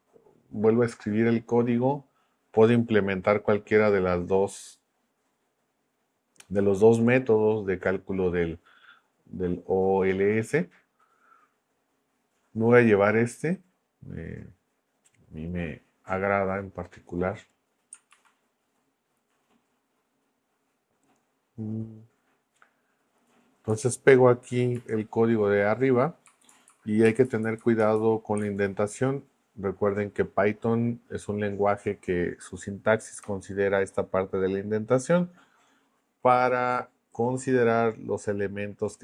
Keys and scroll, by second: 18.1 super+c, 24.7 super+v, 26.3 Up, 27.2 Up, 27.7 Up, 28.4 super+Left, 33.2 BackSpace.